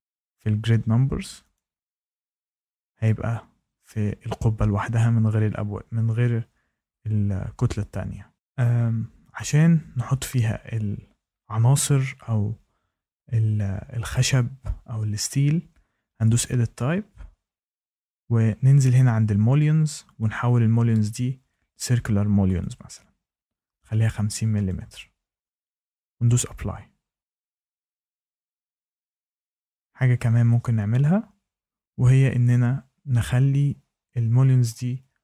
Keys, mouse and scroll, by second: 0.6 6, 1.5 click, 16.3 click, 20.1 click, 21.7 click, 22.5 click, 23.9 click, 24.6 click, 25.6 click, 26.3 click, 27.8 click.